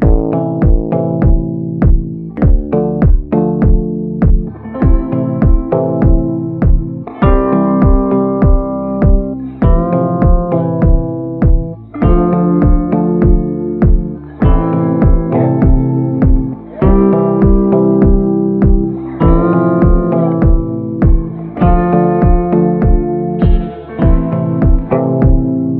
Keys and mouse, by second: 0.3 [, 0.7 [, 0.7 click, 1.8 [, 2.1 click, 2.4 click, 3.1 ctrl+z, 3.2 ctrl+z, 3.3 [, 3.7 click, 4.1 click, 8.2 middle click, 8.8 middle click, 9.6 middle click, 10.0 middle click, 10.5 middle click, 12.4 click, 12.4 ], 13.1 ctrl+z, 13.2 ctrl+z, 13.3 [, 13.6 click, 14.3 ctrl+z, 14.3 ], 14.6 click, 14.6 ], 15.0 ctrl+z, 15.3 click, 15.7 ctrl+z, 16.0 click, 16.7 ctrl+z, 16.7 click, 17.3 ctrl+z, 17.6 click, 18.1 ctrl+z, 18.3 click, 18.9 [, 19.6 click, 19.6 [, 20.1 ctrl+z, 20.6 click, 21.0 ctrl+z, 21.0 ], 21.2 click, 21.9 [, 22.2 click, 23.1 ctrl+z, 23.2 ctrl+z, 24.8 middle click.